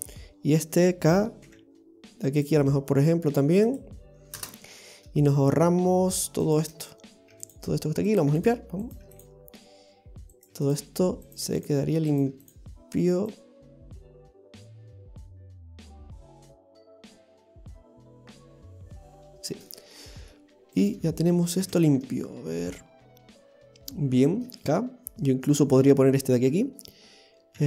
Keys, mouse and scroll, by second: 6.5 right click, 7.3 x, 8.1 right click, 8.2 x, 8.8 right click, 9.0 x, 10.3 right click, 10.5 x, 11.2 right click, 11.4 x, 12.1 right click, 12.3 x, 14.8 right click, 15.1 x, 16.3 right click, 16.5 x, 17.4 right click, 17.5 x, 18.3 right click, 18.4 x, 19.4 scroll down 2, 19.7 middle click, 20.8 right click, 21.6 x, 22.8 middle click.